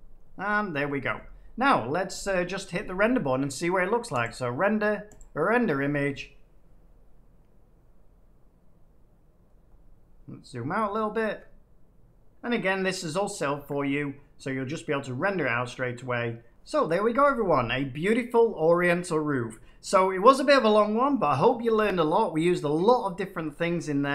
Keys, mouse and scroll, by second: 0.4 click, 4.1-6.0 drag, 10.0-10.8 scroll.